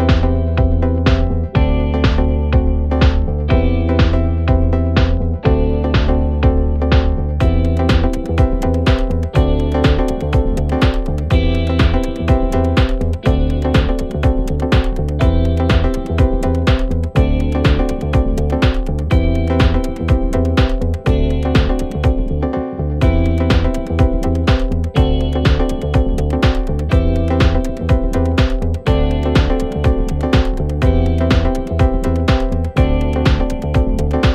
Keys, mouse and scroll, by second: 0.0 click, 0.4 middle click, 1.3 click, 1.8-2.9 middle drag, 2.9 ctrl+click, 3.5 ctrl+click, 3.8 middle click, 4.7 shift+click, 4.9 middle click, 5.7 ctrl+click, 5.9 middle click, 6.8 shift+click, 7.0-8.2 middle drag, 8.2 ctrl+click, 8.4-9.5 middle drag, 9.5 shift+click, 9.7-10.5 middle drag, 10.5 ctrl+click, 10.7 middle click, 11.5 shift+click, 11.8-12.8 middle drag, 12.8 ctrl+click, 12.9-14.5 middle drag, 15.1-16.0 scroll up 9, 16.0-17.2 drag, 25.7 click, 26.0-26.5 scroll down 3, 26.5 scroll up 1, 26.6-27.4 scroll down 3, 27.4-28.9 drag, 28.9 middle click, 29.8 click, 30.9 middle click, 31.9 shift+click, 32.2 ctrl+z, 32.7 ctrl+click, 32.9 middle click, 33.9 shift+click, 34.1-34.3 middle drag.